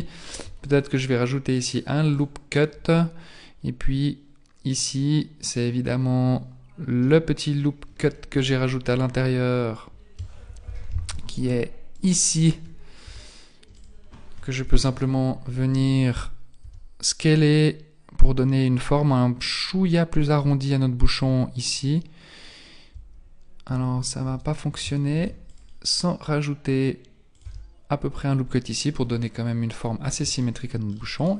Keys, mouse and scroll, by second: 0.3 ctrl+r, 3.6 scroll up 1, 5.1-6.8 scroll down 2, 7.1 middle click, 8.3 z, 9.7-10.3 scroll up 1, 10.7 ctrl+l, 11.9 alt+right click, 13.1 s, 14.6 z, 14.9 KP_1, 16.6 s, 21.2 Tab, 22.9 Tab, 23.7 Tab, 24.3 Tab, 25.1 ctrl+r, 27.4 Tab, 29.1-29.7 scroll down 3, 29.7-30.4 scroll down 4, 30.4 shift+middle click, 30.4 scroll down 3, 31.2 middle click.